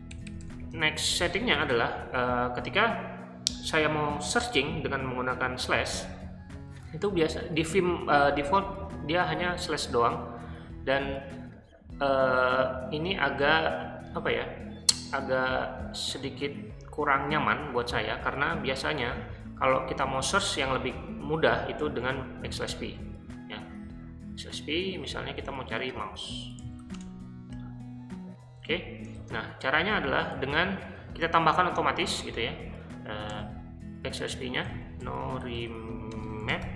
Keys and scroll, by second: 0.0-2.2 typing, 5.7 /, 22.0 \, 22.5 v, 25.6-27.3 typing, 29.2 shift+g, 30.4 i, 33.3 n, 34.7-36.7 typing.